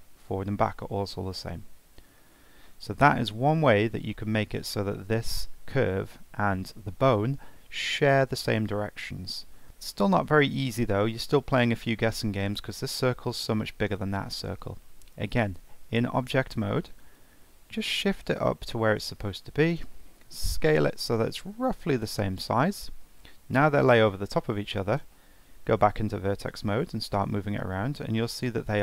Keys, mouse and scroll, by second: 2.6 middle click, 4.1 middle click, 8.9 Tab, 9.5 scroll up 2, 17.4 g, 20.2 s, 22.7-23.1 middle drag, 23.1-23.5 scroll up 3, 23.5-24.8 middle drag.